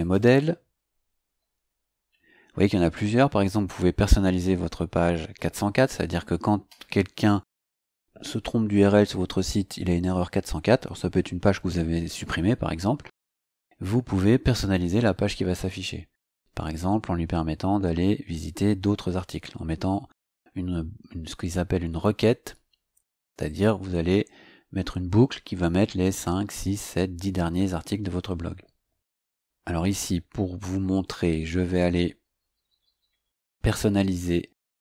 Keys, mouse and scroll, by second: 0.0 click, 1.9-2.2 scroll down 2, 2.2-2.8 scroll up 2, 2.8-3.1 scroll up 1, 31.1 scroll down 2, 32.0-34.8 scroll down 2.